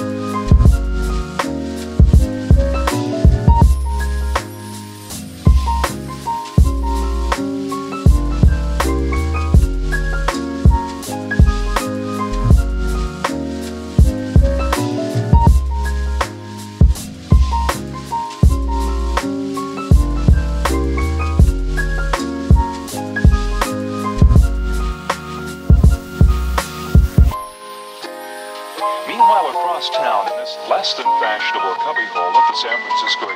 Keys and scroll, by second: 9.7 space, 13.3 space, 14.9 c, 15.5 space, 24.6 space, 32.5 space.